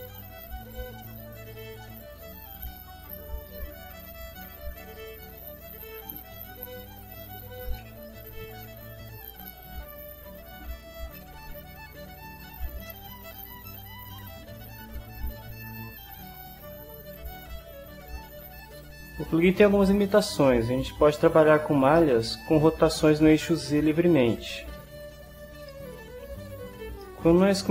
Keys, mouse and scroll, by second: 1.3 right click, 2.8-5.4 right drag, 5.7 right click, 6.9 scroll up 1, 7.1 middle click, 8.6 ctrl+shift+scroll up 2, 8.7 ctrl+shift+middle click, 8.8 shift+scroll down 1, 8.9 shift+scroll up 2, 9.5 ctrl+shift+click, 9.9 ctrl+middle click, 10.6-15.5 right drag, 16.2 ctrl+scroll down 2, 16.4 ctrl+scroll up 2, 17.4 ctrl+scroll down 2, 18.2 shift+middle click, 18.6 click, 19.8-21.5 middle drag, 22.0 middle click, 23.6-25.2 drag, 25.7 shift+middle click, 26.0 shift+click, 27.0 shift+middle click, 27.1 shift+click.